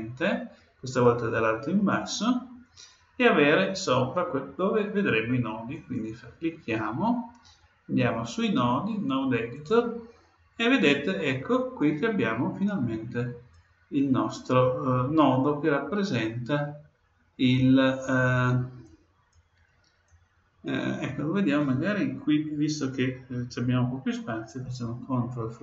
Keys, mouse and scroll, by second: 5.7-7.5 drag, 10.8-12.8 middle drag, 13.5-15.3 drag, 15.3-17.5 middle drag, 17.5-22.0 drag.